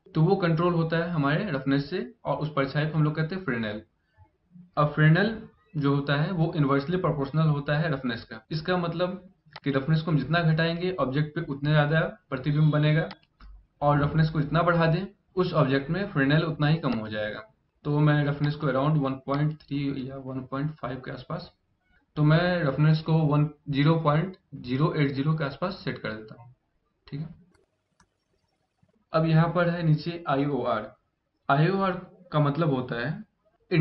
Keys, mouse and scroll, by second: 9.3 click, 12.8 click, 16.6 click, 18.2 click, 19.1 click, 24.7 middle click.